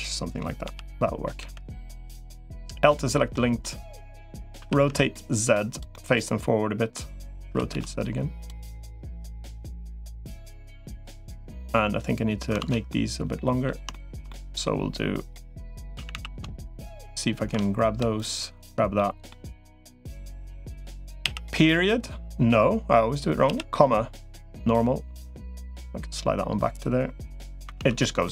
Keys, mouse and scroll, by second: 0.4 l, 1.2 l, 1.5 middle click, 2.2 middle click, 3.4 middle click, 4.4 r, 5.7-6.7 middle drag, 7.4 r, 8.8 middle click, 10.0 click, 10.7 middle click, 11.3 middle click, 12.4 alt+z, 12.7 middle click, 13.7 shift+middle click, 14.1 middle click, 15.4 click, 15.8 a, 16.0 a, 16.6 alt+shift+click, 18.0 click, 18.8 middle click, 19.5 middle click, 25.4-26.6 drag, 27.6 alt+z, 28.0 middle click.